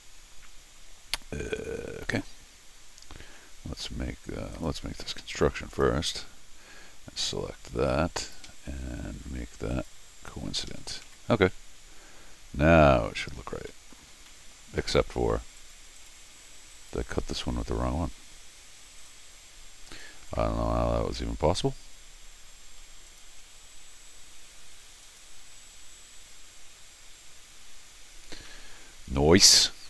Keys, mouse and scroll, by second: 0.5 middle click, 2.3 Escape, 4.5 click, 5.7 click, 7.2 click, 8.2 ctrl+click, 9.7 click, 10.7 Escape, 10.8 scroll down 2, 10.9-11.6 typing, 13.7 middle click, 14.3 middle click, 15.0 middle click, 15.6 click, 16.0 click, 16.7 click, 19.0 click, 19.9 click, 21.8 scroll down 2, 23.1 click, 25.0 click, 26.3 Return, 28.5-29.6 middle drag.